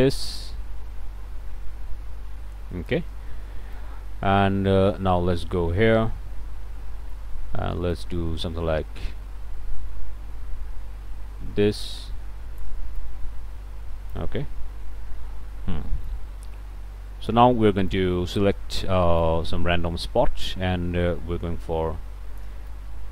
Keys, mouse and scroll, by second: 3.8-7.4 right drag, 8.0-12.9 drag, 13.0-14.4 right drag, 14.6 middle click, 16.1-18.2 right drag, 19.3-22.7 drag, 22.7-23.1 right drag.